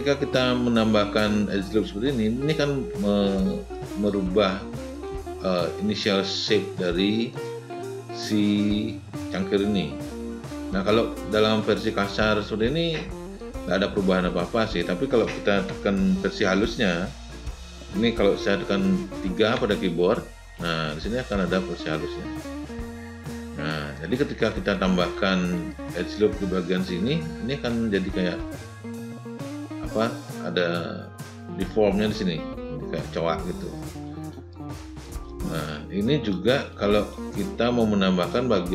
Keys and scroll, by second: 19.4 3.